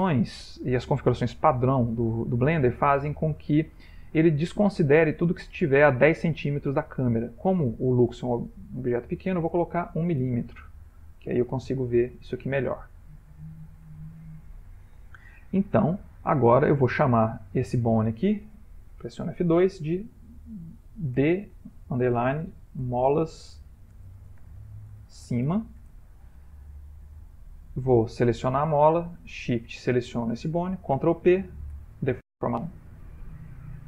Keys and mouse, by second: 8.7 shift+click, 10.4 m, 12.7 ctrl+middle click, 15.9 middle click, 16.7 middle click, 17.3 click, 18.8 F2, 27.8 Tab, 28.3 click, 29.5 shift+click, 31.0 ctrl+p.